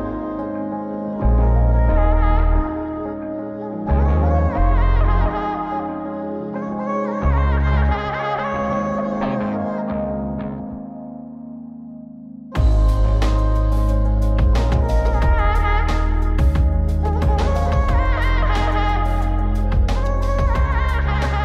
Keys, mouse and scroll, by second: 2.0-4.1 drag, 5.0 click, 5.8 g, 10.0 g, 13.4 click, 14.8 click, 16.5 click, 17.9 click, 18.4 g.